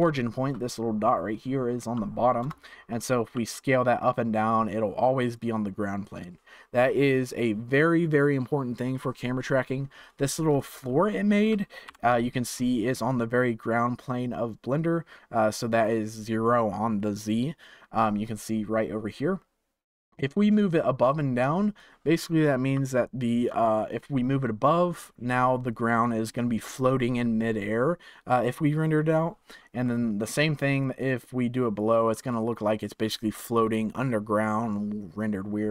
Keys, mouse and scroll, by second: 0.1-2.4 shift+middle drag, 2.4 KP_0, 3.3 s, 10.5 click, 11.1-11.8 shift+middle drag, 11.8 KP_1, 12.5-15.4 scroll down 2, 15.4-18.0 scroll up 4, 18.0-18.8 scroll up 1, 20.2-23.4 drag, 25.6-28.7 middle drag, 29.8-30.9 middle drag, 30.9-32.2 drag, 32.2-35.3 middle drag.